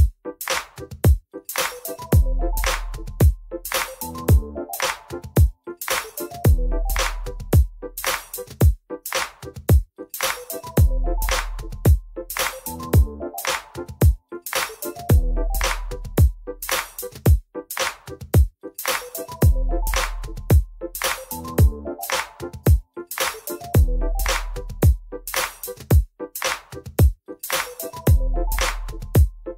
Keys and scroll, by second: 0.4 Return, 0.5 w, 4.4 alt+q, 6.8 ctrl+a, 8.1 alt+q, 9.1 alt+q, 10.0 F3, 11.5 F3.